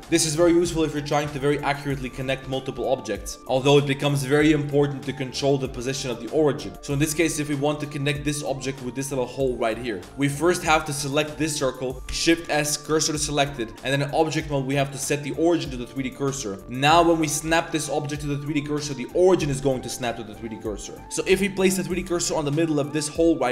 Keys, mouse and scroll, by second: 0.0 shift+click, 0.0 g, 0.1 click, 0.4 shift+s, 1.1 click, 1.5 s, 1.8 click, 2.2 g, 3.2 shift+click, 3.4 g, 3.8 click, 4.0 shift+drag, 4.4 click, 4.9 drag, 5.1 click, 5.3 click, 5.8 click, 6.7 click, 7.0 click, 7.9 g, 8.4 click, 9.7 drag, 10.0 shift+click, 10.1 Tab, 10.6 1, 10.8 alt+click, 11.4 z, 12.1 shift+s, 13.3 Tab, 13.4 z, 14.4-15.9 drag, 16.4 click, 16.6 z, 17.5 shift+s, 18.4 click, 20.8 click, 21.0 2, 21.0 shift+s, 21.0 z, 21.3 shift+s, 22.4 Tab, 23.4 click.